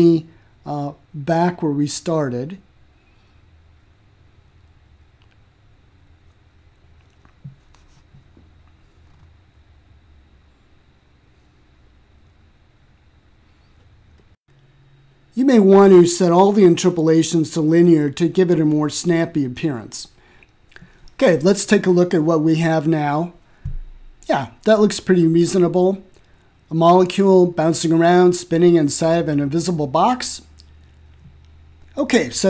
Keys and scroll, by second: 0.7 2, 1.1 7, 1.6 0, 2.3 Return, 5.3-6.4 typing, 7.1 Return, 14.9 3, 15.4 6, 16.0 0, 18.4 0, 19.0 Return.